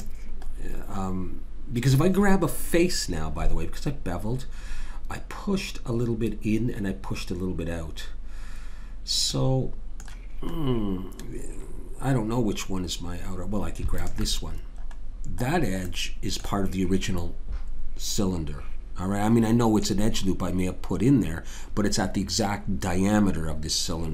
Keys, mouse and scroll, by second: 2.2-3.3 middle drag, 9.3-12.6 middle drag, 13.9 click, 15.9-17.6 middle drag, 18.4-22.6 middle drag.